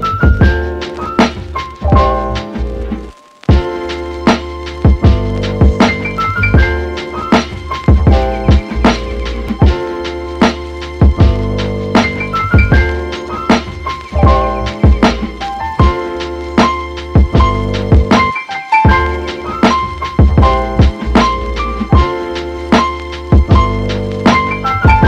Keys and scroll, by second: 18.2 space, 19.9 super+z, 21.7 super+z.